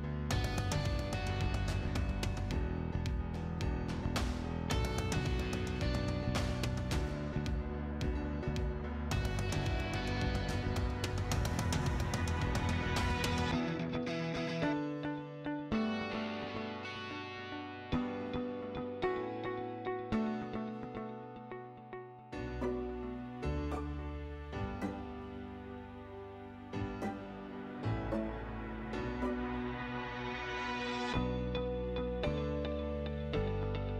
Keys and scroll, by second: 0.2 t, 0.5 space, 14.2 Escape, 17.9 c, 18.5 space, 29.0 m, 29.2 space, 31.8-32.7 typing.